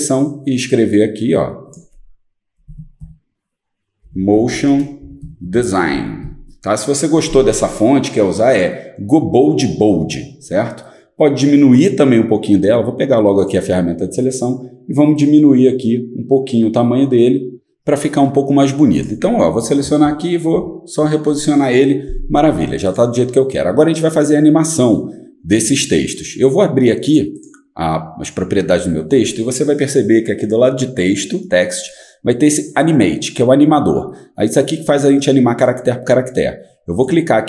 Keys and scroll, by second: 2.6-6.4 typing, 9.8 typing, 20.0 shift+Up, 20.5 shift+Up.